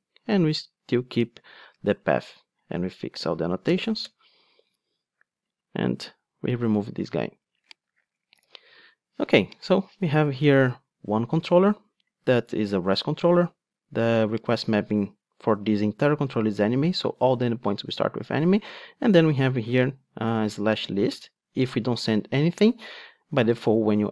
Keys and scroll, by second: 0.3 super+x, 3.6 alt+Return, 6.3 super+x, 8.3 alt+super+l.